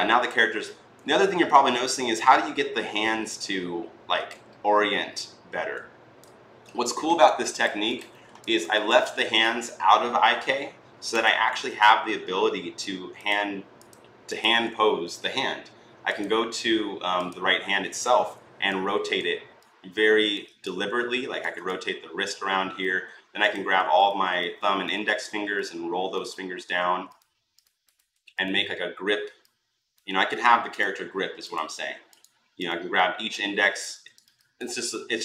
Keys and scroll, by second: 17.9 r, 26.4 ctrl+z, 29.9 ctrl+z.